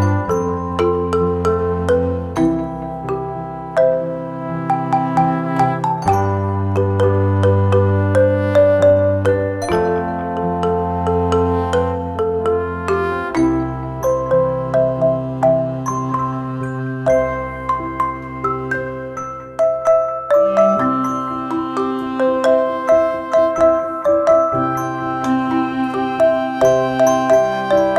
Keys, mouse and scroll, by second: 4.2 click, 9.1 click, 9.1 click, 10.1 -, 11.7 click, 20.2 click.